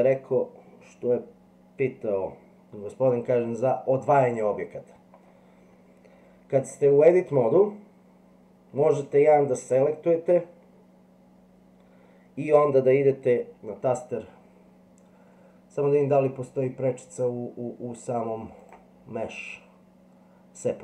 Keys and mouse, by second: 4.3 middle click, 18.6-20.8 drag.